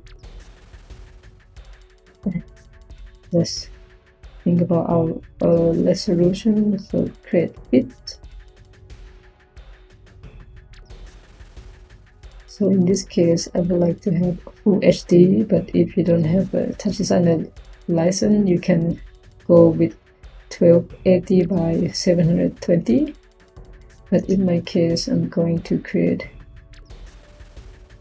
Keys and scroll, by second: 2.9 Tab, 4.7 f, 5.4 i, 23.9 Tab, 27.8-28.0 typing.